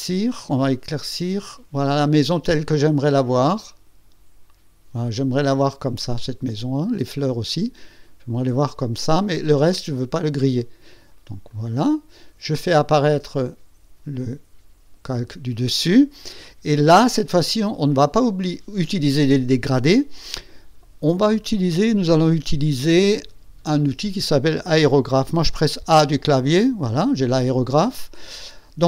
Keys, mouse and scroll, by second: 0.5-6.2 drag, 7.4-10.6 drag, 11.4 click, 13.2 click, 25.8 a.